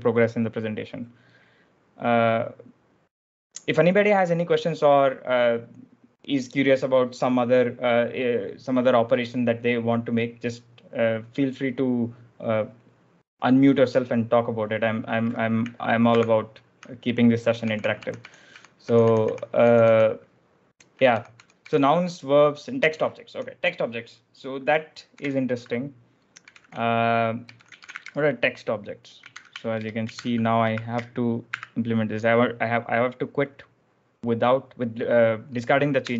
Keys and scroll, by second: 16.0 ctrl+f, 17.5-24.0 typing, 25.0 ctrl+j, 26.0 ctrl+l, 26.3-31.4 typing, 36.0 Return.